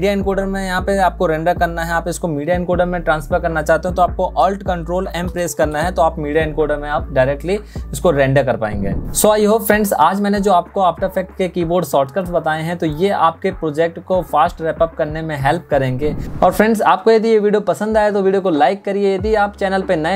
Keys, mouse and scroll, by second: 4.1 ctrl+alt+m.